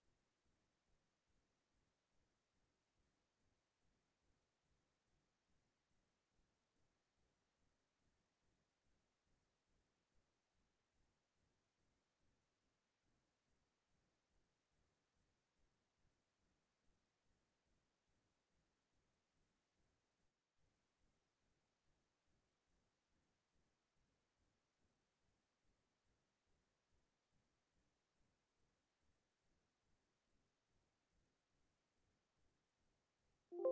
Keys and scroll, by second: 17.5 Delete.